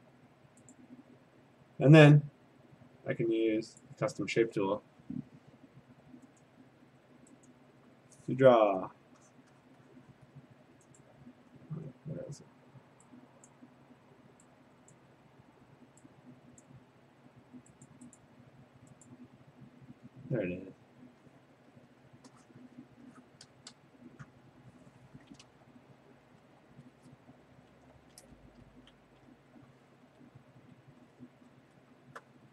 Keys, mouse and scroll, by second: 3.8 click, 6.4 click, 7.5 click, 9.4 click, 9.7 click, 10.0 click, 10.2 click, 10.4 click, 11.0 right click, 11.6-12.5 scroll, 13.5 click, 14.9 click, 17.9 click, 18.2 click, 19.1 click, 20.6 click, 21.6 click, 21.8 click, 22.2 click, 22.6 click, 22.8 click, 23.3 click, 23.6 click, 23.8 click, 25.5 BackSpace, 26.4 BackSpace, 28.2 ctrl+a, 28.4 BackSpace, 29.0 ctrl+d, 30.0 ctrl+a, 30.4 Delete, 30.9 ctrl+d, 31.9 scroll.